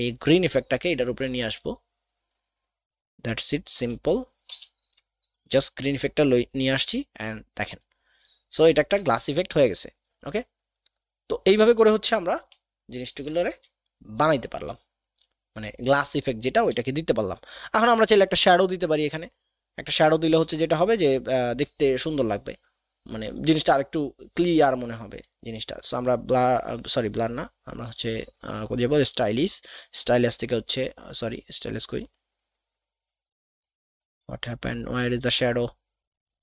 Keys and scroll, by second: 4.5 ctrl+[, 20.4 ctrl+KP_2.